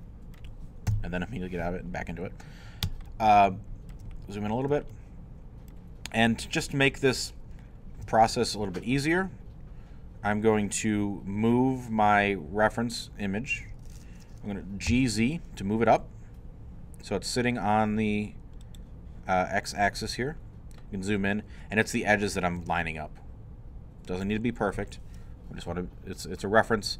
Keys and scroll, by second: 0.9 i, 14.9 g, 15.1 z, 22.3-23.3 typing.